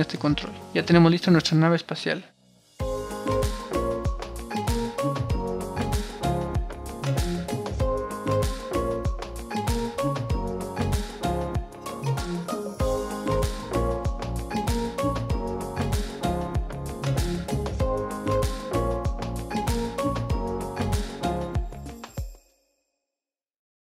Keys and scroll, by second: 2.4 super+r.